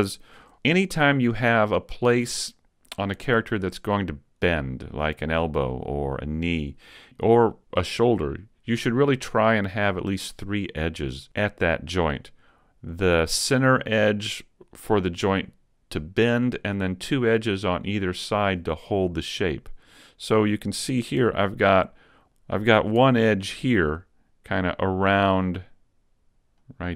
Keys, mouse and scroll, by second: 0.0 shift+middle click, 22.3 super+z, 22.3 alt+shift+right click, 24.7 alt+shift+right click, 26.6 alt+shift+right click.